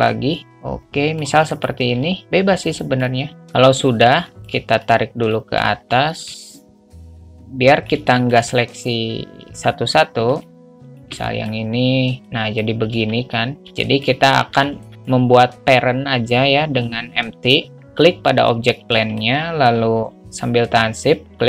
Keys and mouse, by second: 1.9 click, 2.2-3.4 alt+middle drag, 4.6 middle click, 4.6 shift+a, 5.1 click, 5.9 shift+a, 6.6 click, 7.5 click, 8.3 shift+a, 8.4 middle drag, 10.7 drag, 11.1 click, 11.5 alt+middle click, 12.3 click, 13.2 ctrl+z, 14.1 shift+middle click, 14.9 alt+middle click, 19.3 alt+middle click.